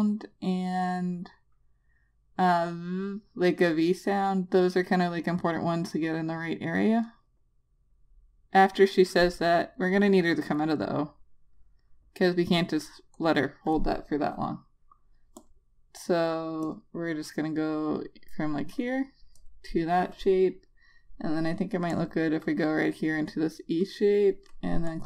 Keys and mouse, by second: 7.4 click, 8.1 Return, 9.1 click, 13.6 click.